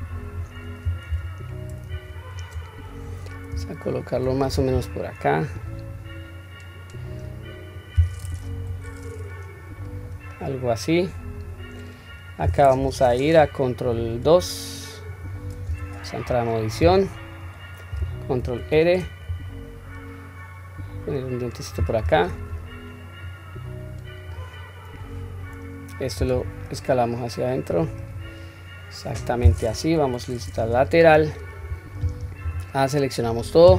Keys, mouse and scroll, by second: 1.0-1.4 scroll up 3, 1.0 g, 2.3-3.0 scroll down 1, 3.0-3.4 scroll down 1, 3.7-4.1 shift+middle drag, 4.7 s, 6.2-7.2 drag, 7.7-8.2 drag, 8.5 KP_3, 9.6 click, 10.3-12.4 middle drag, 12.8 KP_1, 14.2 ctrl+2, 15.7 Tab, 17.0-17.4 scroll up 2, 18.4 ctrl+r, 23.2-24.3 drag, 25.0 click, 26.3 s, 28.9-29.4 scroll down 1, 29.9 KP_3, 30.6-32.0 scroll up 1, 32.0-32.4 scroll up 1, 32.4 a.